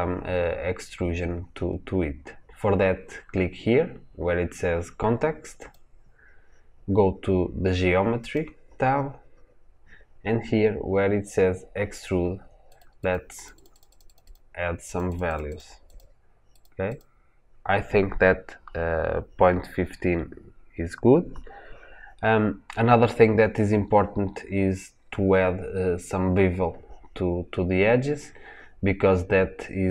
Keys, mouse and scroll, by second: 12.6-25.0 drag, 25.0-25.6 scroll down 2, 25.6-26.9 scroll up 1.